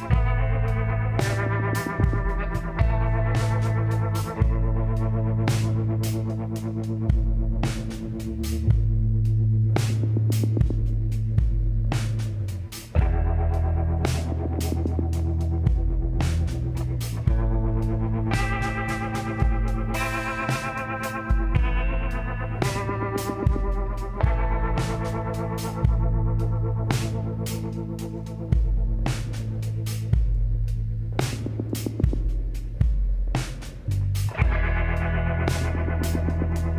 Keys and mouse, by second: 1.8-7.5 drag, 7.1 s, 10.1 click, 10.6 middle click, 10.8-14.0 drag, 16.4 middle click, 16.6 click, 17.0 middle click, 17.2 click, 18.2 w, 18.8 click, 28.1 a, 28.3 middle click, 28.7-30.7 middle drag, 30.8 middle click, 31.1 Tab, 33.1 middle click, 36.2-36.7 middle drag.